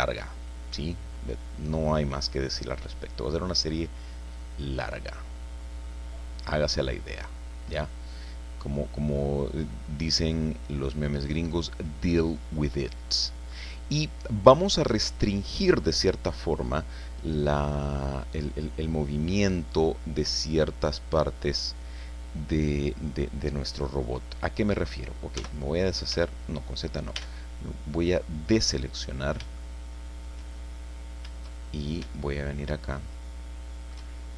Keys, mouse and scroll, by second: 3.2 scroll up 1, 4.9 scroll down 2, 5.8-6.3 scroll up 4, 6.5 scroll down 2, 7.8 scroll up 2, 10.9 click, 11.7-12.3 scroll down 4, 13.3 scroll up 2, 25.3 z, 26.1 z, 27.1 a, 27.6-29.4 drag, 29.4 shift+middle click, 29.6 shift+middle click, 30.5-30.9 shift+scroll up 3, 31.6 shift+scroll up 1, 32.1-34.1 shift+middle drag, 34.2 shift+scroll up 1.